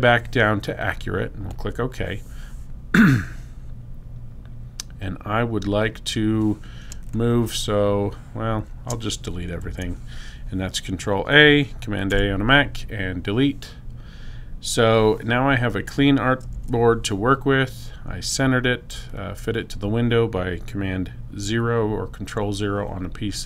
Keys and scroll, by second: 6.9 space, 9.5 super+a, 12.0 BackSpace, 17.1 super+0.